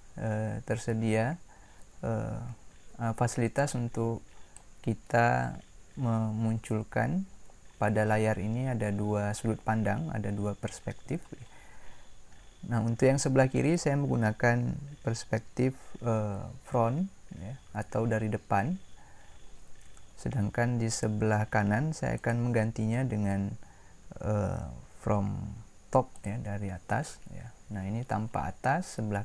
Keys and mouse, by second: 22.1-23.2 drag.